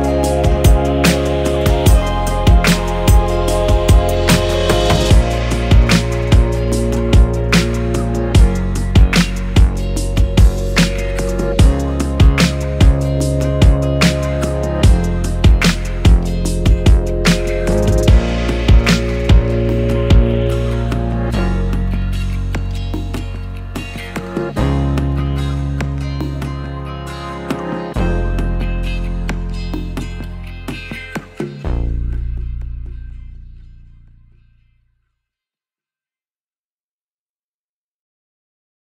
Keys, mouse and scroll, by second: 0.0 click, 4.1-11.2 drag, 11.2-13.4 middle drag, 12.2 KP_0, 13.4-26.7 ctrl+right drag, 26.7-31.3 drag, 27.0 ctrl+z, 27.5 KP_Enter, 28.8 KP_1, 31.3-32.5 shift+right drag, 32.5-33.0 drag, 33.0-34.8 shift+right drag, 34.8 click, 35.4 KP_Enter, 35.7-38.2 right drag, 38.2-38.8 drag.